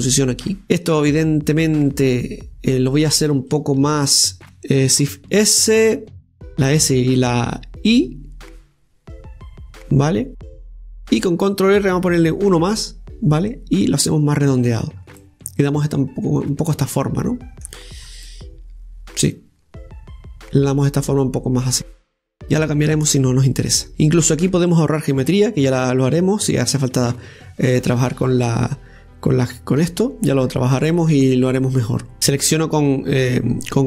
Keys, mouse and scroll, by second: 1.4 right click, 2.4 right click, 4.4 shift+right click, 5.9 shift+s, 14.2 right click, 15.8 scroll down 2, 16.1-18.7 middle drag, 18.7-19.1 scroll down 5, 19.1-22.2 middle drag, 22.7-23.9 scroll up 3, 23.9-24.7 scroll up 1, 24.7-27.7 middle drag, 31.5 scroll down 1, 31.8 middle click, 33.2 Tab.